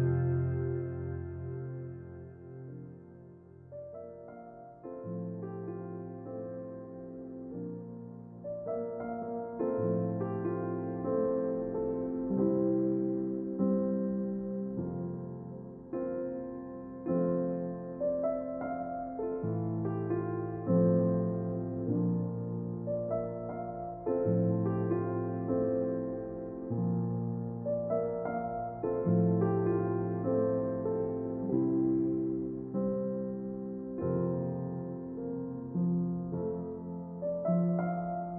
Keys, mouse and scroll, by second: 10.7-14.7 middle drag, 20.0-21.7 middle drag, 25.0 shift+z, 28.3-30.2 drag, 31.2-33.0 drag, 36.3 Tab, 37.2-38.3 drag.